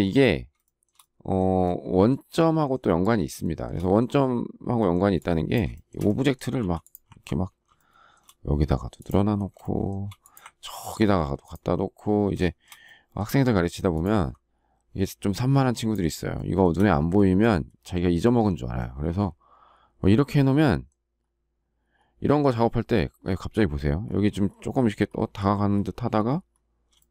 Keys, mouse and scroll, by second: 0.6 shift+middle click, 3.4 shift+middle click, 5.7 shift+middle click, 6.6 m, 7.8 shift+middle click, 9.6 shift+middle click, 12.4 shift+middle click, 16.3 shift+middle click, 17.2 space, 27.0 shift+middle click.